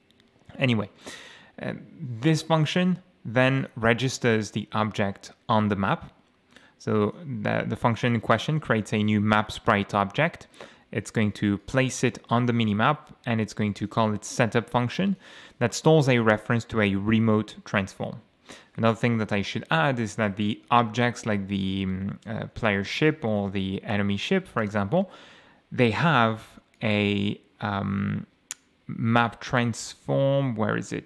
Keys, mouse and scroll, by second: 1.2 click, 3.4 click, 7.0 click, 8.0-9.3 drag, 9.4 click, 11.6 click, 13.8 click, 15.1 click, 20.1 ctrl+shift+F11, 21.0 ctrl+shift+o, 22.6-23.9 typing, 24.6 Down, 24.6 Return, 26.7 click, 27.5-27.8 scroll down 2, 28.0-28.3 scroll down 2, 29.1-29.5 scroll up 2, 30.4 scroll down 2.